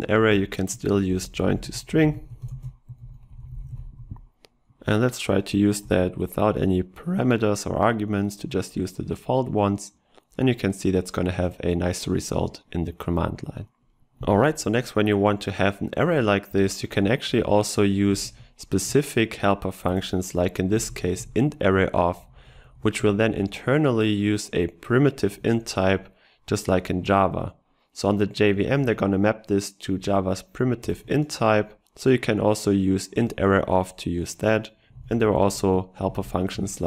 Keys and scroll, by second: 2.8 ctrl+space, 23.2 ctrl+shift+Right.